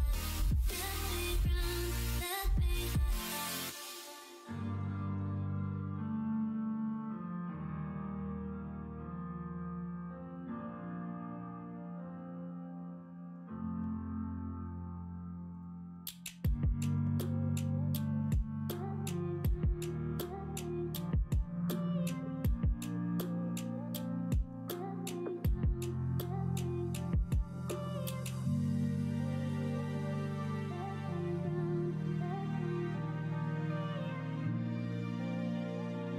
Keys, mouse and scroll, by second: 1.4 f, 3.9 shift+middle click, 8.2 e, 17.0 ctrl+z, 18.2 click, 19.7 e, 23.9 middle click, 24.8-25.8 middle drag, 27.2 middle click, 28.2 middle click, 31.0 l, 31.7 click, 32.1 l, 32.8 middle click, 34.3 e.